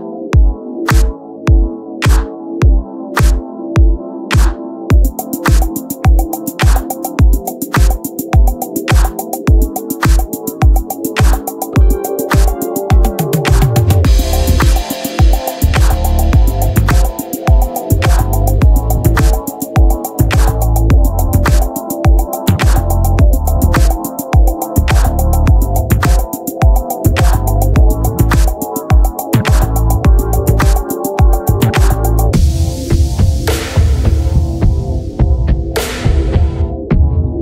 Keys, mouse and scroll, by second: 6.5 click, 8.8 Tab, 10.2 KP_3, 10.8-12.3 drag, 10.9 z, 11.2 c, 13.2-14.4 drag, 14.4-16.2 right drag, 14.6 c, 15.5 click, 16.3 Tab, 16.7 z, 17.4-18.6 right drag, 18.8 middle click, 19.2-20.6 right drag, 20.1-22.2 drag, 22.2-23.9 middle drag, 23.9 click, 24.5-25.6 middle drag, 25.6-26.7 drag, 27.9-29.2 drag, 31.1-32.4 drag, 32.4-33.6 right drag, 32.6 z, 33.6 z, 34.2 x, 35.0 ctrl+z, 35.4 right click, 36.2 z, 36.7 z, 37.1 x.